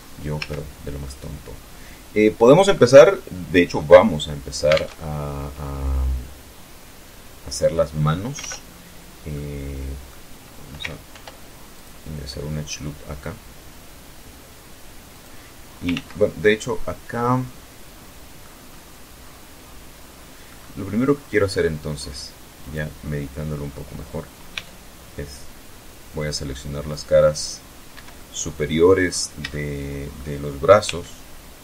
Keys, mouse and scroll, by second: 1.6-1.9 scroll down 2, 2.6 scroll up 2, 3.3 alt+Tab, 6.9 alt+Tab, 7.8 click, 9.6 ctrl+r, 10.3 click, 13.6 click, 14.4 ctrl+z, 15.2-15.5 ctrl+scroll down 3, 15.6-17.1 middle drag, 17.2-17.6 scroll up 1, 17.7 scroll up 1, 18.3 scroll down 1, 19.0 middle click, 19.3 middle click, 21.1 click, 23.0 c, 23.5 scroll down 2, 24.6-25.6 drag, 26.4 Escape, 26.6-27.5 middle drag, 27.6 scroll up 1, 28.0-28.7 shift+middle drag, 28.7 shift+scroll up 1, 29.3 c, 30.4-31.6 drag.